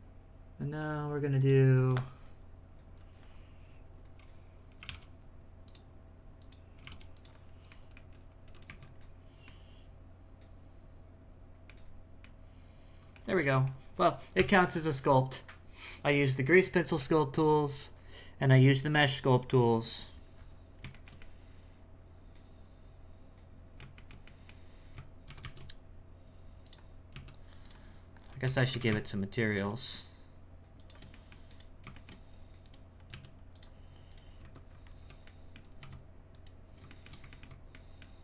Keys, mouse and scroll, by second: 1.4-4.5 drag, 6.4 click, 7.7-8.7 middle drag, 8.7 z, 9.4-13.2 middle drag, 13.2-13.5 scroll down 2, 13.5 middle click, 14.3 KP_1, 20.3-20.9 scroll up 5, 20.9-24.6 shift+middle drag, 24.6-25.2 scroll down 1, 25.2 shift+c, 25.4 shift+a, 27.1 s, 27.9-28.4 scroll down 1, 28.4 g, 31.1 middle click, 31.5 right click, 31.9 shift+middle click, 32.6 right click, 32.9 scroll down 1, 33.1 s, 34.1 right click, 34.4 Tab, 34.7 scroll up 4, 35.2 middle click, 36.3 right click, 36.9 shift+middle click, 37.7 middle click.